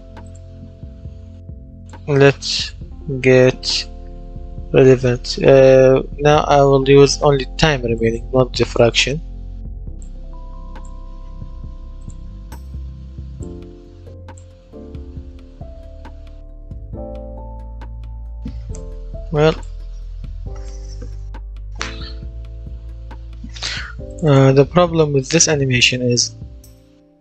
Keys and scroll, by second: 1.2 Delete, 2.4-5.0 typing, 14.6 w, 15.2 space, 17.7 Escape, 23.1 F10.